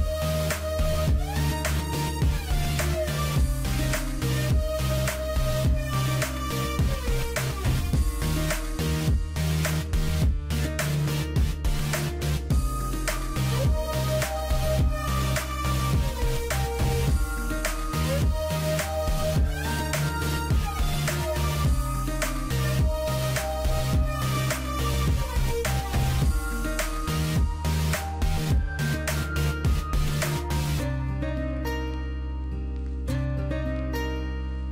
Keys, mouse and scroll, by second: 1.6 ctrl+=, 2.1 ctrl+=, 13.9 double click, 27.6 ctrl+i.